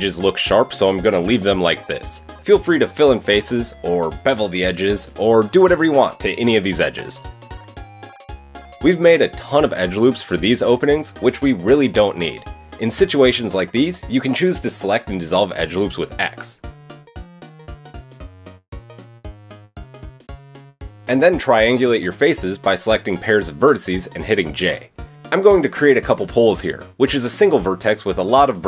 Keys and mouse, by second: 2.3 Tab, 2.8 click, 4.8 middle click, 5.4-8.6 drag, 5.4-7.1 right drag, 8.1 right click, 8.6 Tab, 8.6-11.6 middle drag, 9.0 Tab, 9.3 KP_3, 10.1 Tab, 11.8 middle click, 12.0-13.1 middle drag, 13.1-23.1 drag, 13.4 middle click, 13.4 right click, 13.7 shift+middle click, 13.7 shift+right click, 14.6 shift+middle click, 14.6 shift+right click, 15.0 x, 22.3 j, 23.4 shift+click, 23.8 j, 24.2 click, 24.7 shift+click, 24.9 j, 25.9 shift+click, 26.2 j, 27.2 shift+click, 27.4 j, 27.5 click, 27.9 shift+click, 28.4 click, 28.4 j.